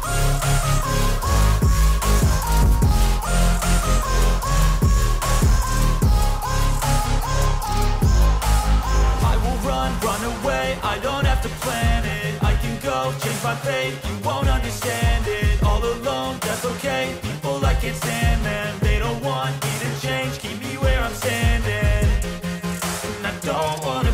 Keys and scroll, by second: 15.3 ctrl+t.